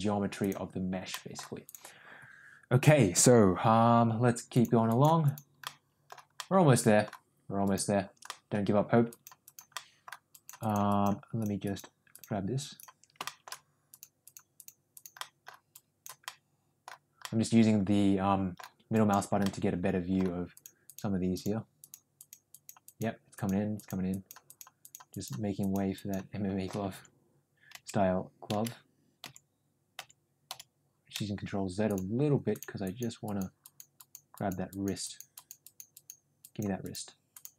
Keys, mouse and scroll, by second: 0.3 click, 1.0 middle click, 1.6 click, 4.4 click, 4.8 click, 5.2 click, 5.6 middle click, 6.3 middle click, 7.5 click, 8.2 middle click, 9.0 click, 9.3 click, 9.7 middle click, 10.2 click, 10.5 click, 10.8 click, 11.3 click, 11.5 click, 12.0 click, 12.6 click, 13.1 shift+middle click, 13.8 click, 14.2 click, 14.5 click, 14.8 click, 15.1 middle click, 15.7 click, 16.2 middle click, 17.1-18.5 middle drag, 18.8 click, 19.4 middle click, 20.4 click, 20.8 click, 21.2 click, 21.7 click, 22.1 click, 22.4 click, 22.8 click, 23.2 click, 23.7 click, 24.0 click, 24.4 click, 24.7 click, 25.0 click, 25.5 click, 25.9 click, 27.2-31.0 ctrl+z, 31.8 click, 32.4 click, 32.7 click, 33.2 click, 33.5 click, 33.9 click, 34.3 click, 34.6 click, 34.9 click, 35.3 click, 35.5 click, 35.8 click, 36.3 click, 36.7 click, 37.2 click.